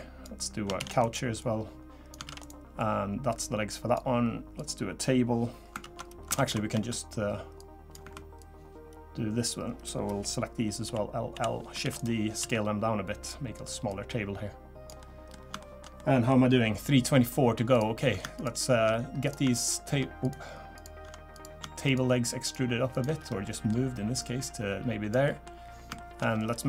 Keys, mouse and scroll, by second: 0.8 shift+d, 1.4 click, 2.2 shift+d, 2.8 click, 4.6 click, 5.8 ctrl+z, 6.4 ctrl+z, 7.6 click, 8.4 click, 10.8 l, 11.3 l, 11.8 shift+d, 12.4 s, 13.9 click, 15.0 middle click, 15.3 scroll up 1, 15.6 shift+middle click, 15.9 scroll up 1, 16.0 middle click, 16.5 scroll up 1, 17.7 click, 18.3 shift+click, 19.2 click, 19.6 shift+click, 20.2 click, 20.7 click, 21.8 shift+click, 23.2-23.5 scroll down 3, 23.4 middle click, 24.2 click, 25.2 middle click, 25.6 scroll up 1, 25.9 shift+middle click, 26.3 scroll down 2.